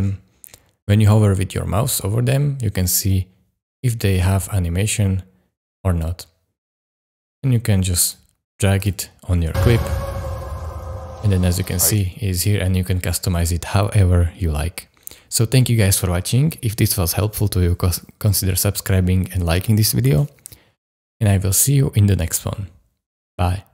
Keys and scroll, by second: 9.4 space, 11.9 space.